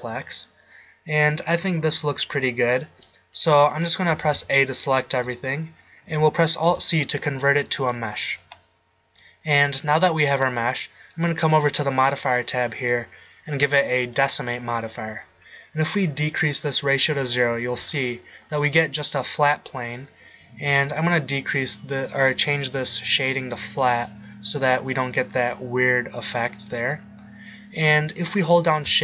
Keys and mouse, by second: 3.4-4.1 middle drag, 4.1 a, 4.3 a, 6.7 alt+c, 14.6-16.4 middle drag, 17.9-18.3 drag, 23.4 click, 25.3-29.0 middle drag.